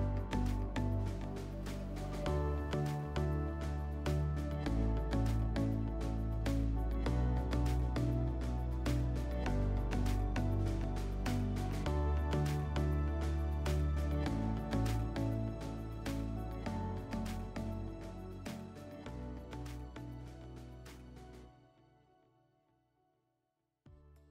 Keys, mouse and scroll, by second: 1.8 alt+middle click.